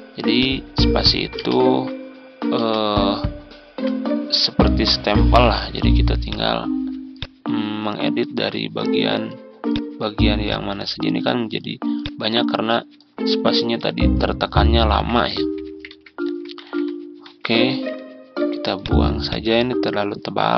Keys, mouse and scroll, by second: 0.2 click, 1.9 space, 6.1-12.5 drag, 13.0 click, 13.4 ctrl+scroll down 1, 14.8 ctrl+z, 15.0 ctrl+z, 15.3 ctrl+z, 15.6 ctrl+z, 15.8-16.5 typing, 17.6 ctrl+shift+z, 18.6 click.